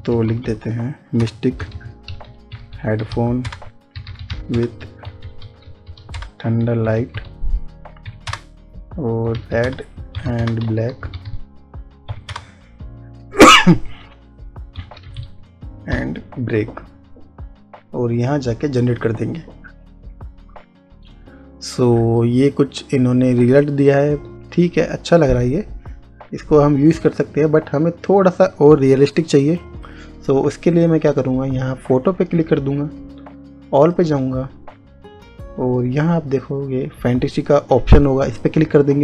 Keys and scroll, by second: 0.0-12.4 typing, 14.9 b.